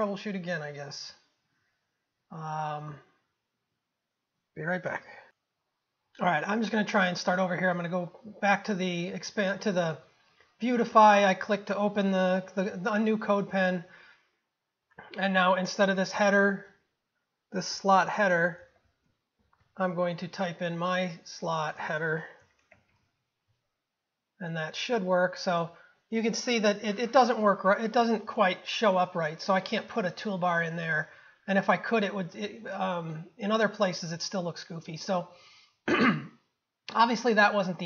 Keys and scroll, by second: 19.8 ctrl+v.